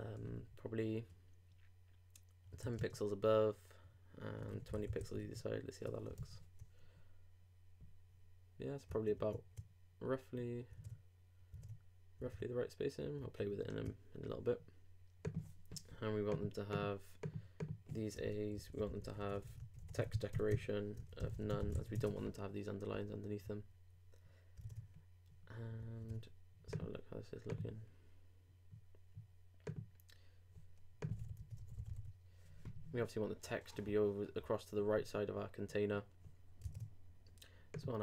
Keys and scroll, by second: 5.0 super+;, 5.2 super+Tab, 6.2 super+r, 10.8 super+Tab, 21.7 super+;, 21.9 super+Tab, 22.9 super+r, 24.6 super+Tab, 26.0 super+Tab, 36.6 super+Tab.